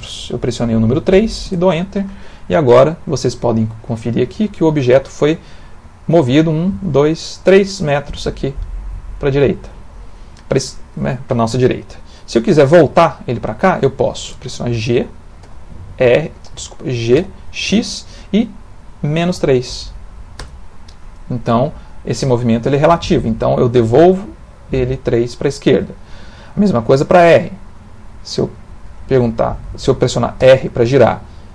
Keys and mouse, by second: 15.4 g, 17.2 g, 30.4 r.